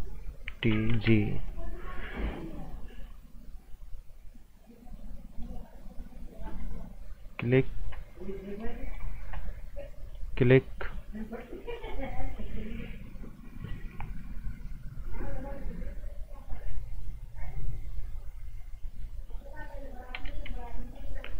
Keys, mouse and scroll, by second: 0.3-1.4 typing, 1.3 click, 5.3 click, 14.9 click, 20.1 g, 20.6 click.